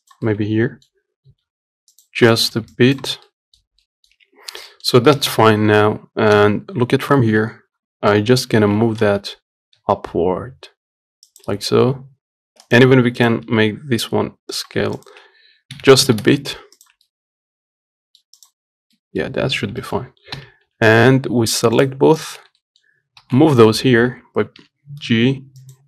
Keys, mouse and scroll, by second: 0.2 click, 0.5-1.6 middle drag, 1.6 g, 2.6 click, 2.8 g, 3.5 middle click, 4.5 Tab, 4.7 scroll down 4, 5.0 middle click, 5.6 KP_1, 6.1-6.6 scroll up 1, 6.6 KP_3, 7.2 scroll up 1, 7.4-8.8 shift+middle drag, 8.8 shift+d, 13.5 click, 13.7 s, 15.3 shift+click, 16.0 g, 17.4-18.7 middle drag, 18.7 click, 19.0 scroll down 1, 19.2 middle click, 19.7 scroll down 1, 20.1 shift+middle click, 20.7 KP_1, 22.1 click, 22.9 shift+middle click, 23.5 shift+d.